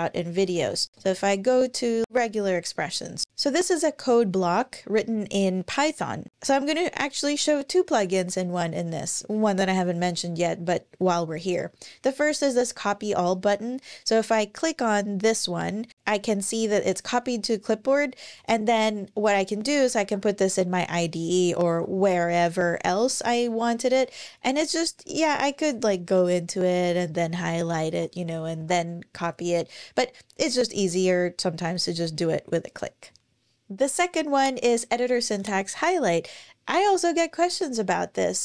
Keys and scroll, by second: 0.0-1.0 typing, 1.9 alt+super+Left, 21.7 Return, 21.7 super+v, 21.7 super+z, 22.9 BackSpace, 26.4 shift+Up, 26.5 shift+Up, 26.7 shift+Up, 27.0 shift+super+Left, 27.3 shift+Up, 28.4 super+c.